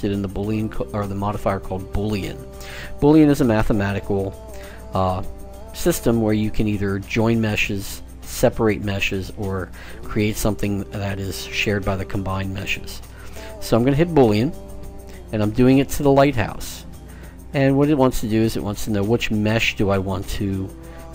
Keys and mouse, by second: 0.3-2.0 drag.